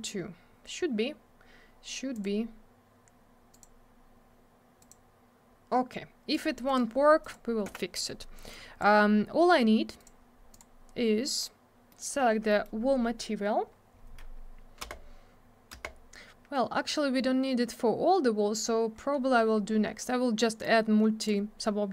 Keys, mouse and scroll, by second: 2.1 click, 2.2 click, 3.5 click, 3.6 click, 4.8 click, 4.9 click, 6.3 click, 6.4 click, 6.7 click, 6.7 double click, 7.2 click, 7.3 click, 7.7 m, 8.5 click, 10.0 click, 10.0 click, 10.5 click, 10.6 click, 11.9 middle click, 12.0 middle click, 12.2 scroll down 1, 12.5 middle click, 12.6 middle click, 12.8 scroll up 1, 14.8 space, 18.9 scroll up 1, 20.6 click.